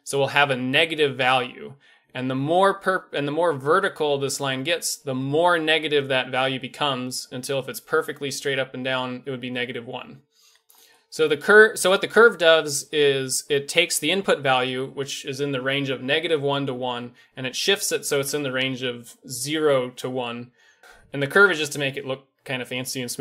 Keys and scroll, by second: 2.2 g, 10.7 a.